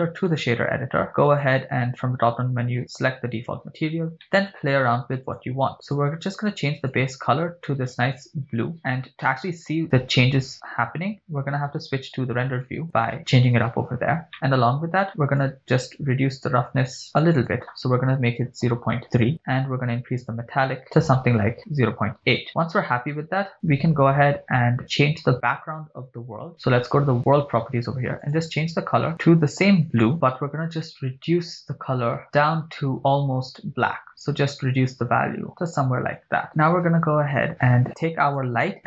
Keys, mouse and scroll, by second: 1.3-3.6 drag, 4.3 middle click, 5.3 click, 5.9 click, 12.8 click, 14.3 middle click, 14.3 scroll up 3, 15.4-19.2 drag, 19.6-22.5 drag, 22.8-25.3 scroll down 1, 25.3 scroll down 1, 27.2 click, 28.2 click, 38.3 click.